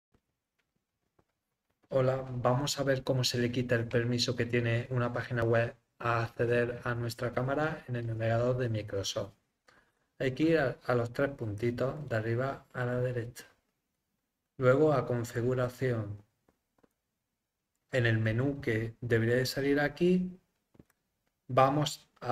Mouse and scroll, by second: 11.5 click, 15.3 click, 20.8 click.